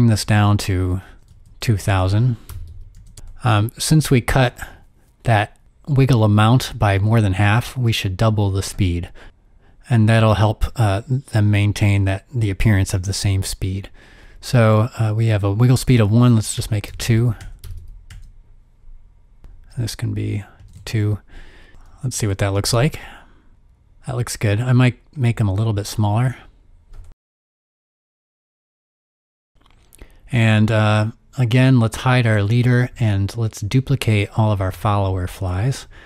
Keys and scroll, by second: 1.0-3.9 typing, 16.6-17.8 typing, 16.8 Tab, 17.0 Tab, 17.5 Tab, 17.6 Tab, 20.6 2, 20.7 Return, 21.7 space, 21.7 0, 25.7 space, 28.7 7, 28.8 Return.